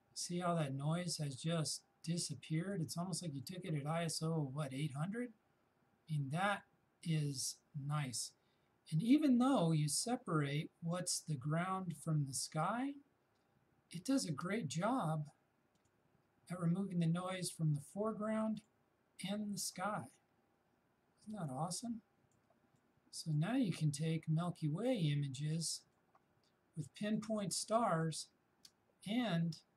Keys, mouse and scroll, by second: 2.7 shift+click, 9.2 shift+space, 12.8 shift+click, 13.0 shift+space, 15.8 shift+click, 21.4 shift+space, 22.8 shift+click, 22.9 shift+space, 23.9 shift+click, 24.0 shift+space, 27.2 shift+click, 27.3 shift+space.